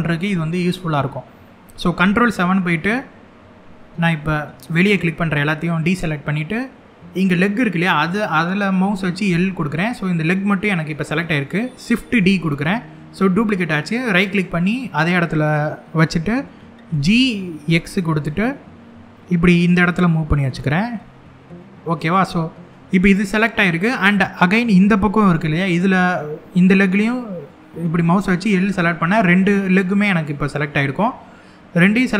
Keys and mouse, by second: 2.0 ctrl+KP_7, 4.5 click, 8.9 l, 11.7 shift+d, 13.8 right click, 16.6 g, 17.3 x, 21.6 click, 28.0 l, 30.0 shift+middle click, 31.9 shift+d.